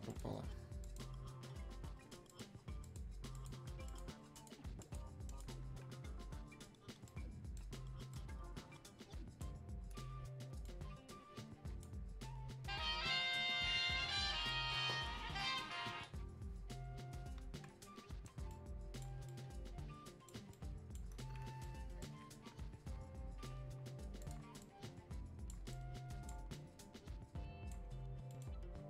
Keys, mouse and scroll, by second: 7.1 right click, 8.1-10.6 drag, 10.6-14.9 drag, 17.8 right click, 18.5 click, 19.3-21.6 drag, 21.6-25.7 ctrl+drag, 25.7 click, 26.5-28.3 drag, 28.3 click.